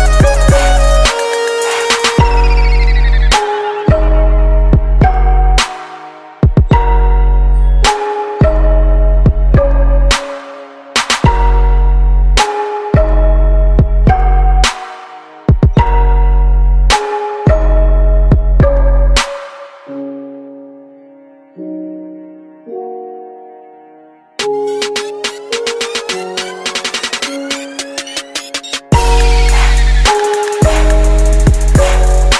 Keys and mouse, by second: 0.3-2.0 drag, 3.2-9.1 drag, 11.8-15.6 drag, 19.7-21.7 drag, 20.6 middle click, 21.7 middle click, 23.1-24.9 drag, 28.3-31.3 drag.